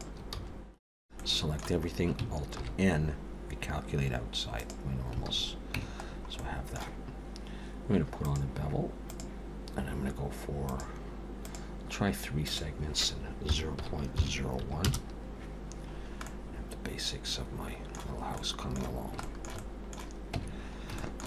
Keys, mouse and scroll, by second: 0.3 f, 0.9 a, 1.2 middle click, 2.6 alt+n, 5.2 alt+a, 5.8 Tab, 6.1-6.4 scroll down 4, 6.4 middle click, 8.2 click, 10.7 click, 11.4 click, 12.4 click, 15.9-16.4 scroll down 3, 16.2 middle click, 18.2 scroll up 1, 18.3 middle click, 18.9-19.2 scroll down 2, 19.2 shift+middle click, 19.6 middle click, 20.4 Tab.